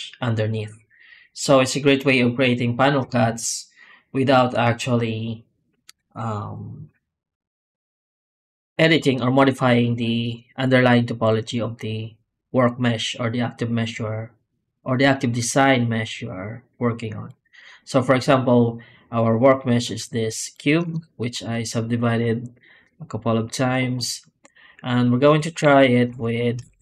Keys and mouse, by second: 16.1 middle click, 17.3 click, 20.7 Tab, 25.5 a, 25.9 Tab, 26.5 shift+q.